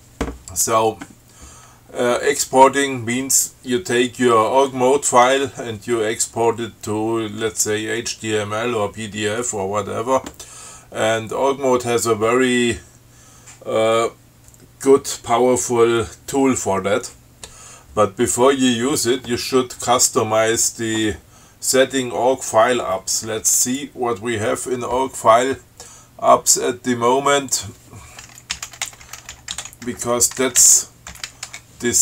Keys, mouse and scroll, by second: 23.9 click, 27.8 click, 28.6-31.6 typing, 31.8 Return.